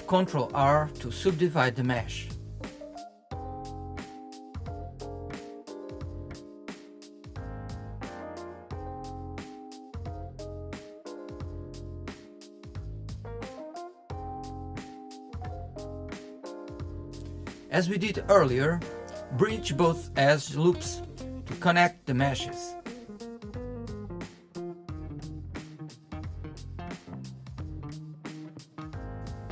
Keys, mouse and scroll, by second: 4.9 scroll down 2, 5.2-5.7 scroll up 1, 5.7 click, 6.2 click, 7.4 l, 15.1 click, 16.8-17.4 scroll down 4, 17.4-18.0 scroll up 5, 18.0 shift+middle click, 18.3 scroll up 4, 18.7 shift+middle click, 19.1 scroll up 2, 19.4-21.6 middle drag, 22.3-24.8 middle drag, 24.8 click, 26.7 middle click, 27.6 shift+click, 28.9 q.